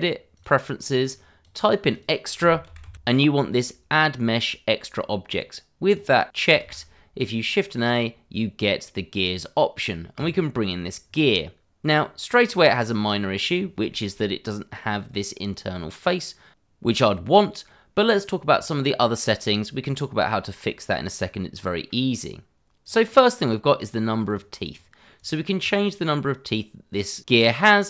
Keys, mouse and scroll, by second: 2.1 e, 2.2 x, 2.5 t, 2.7 r, 5.8 click, 6.6 shift+a, 10.1 click, 11.0-12.4 scroll down 1, 12.4 middle click, 13.5 scroll up 1, 13.8 middle click, 14.0 shift+middle click, 15.8 middle click, 18.5 scroll down 1, 19.4 middle click, 22.8 click, 24.7 click, 24.7 double click, 25.1 click, 25.7 double click.